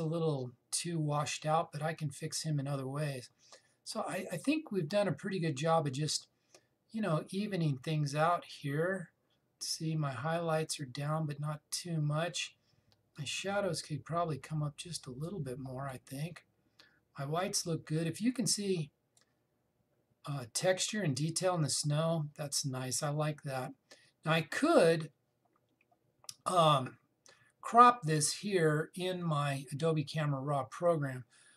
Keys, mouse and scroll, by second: 13.8-31.5 drag.